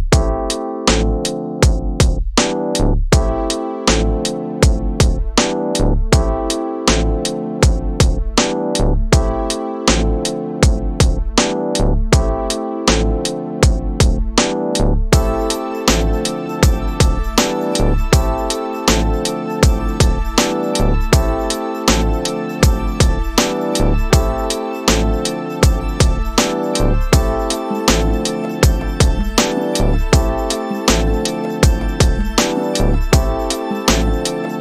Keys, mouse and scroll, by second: 4.3 ctrl+click, 11.9 middle click, 20.5-22.7 drag, 23.6 click, 24.2 click, 28.9-34.0 drag.